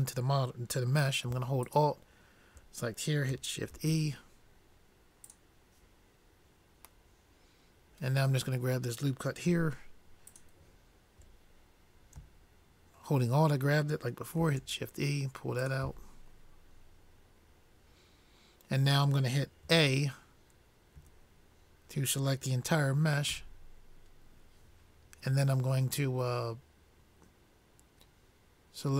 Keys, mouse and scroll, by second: 2.0-3.8 drag, 4.0 shift+e, 10.8-12.3 drag, 14.6 shift+e, 20.0 a, 21.4 a, 23.8 w.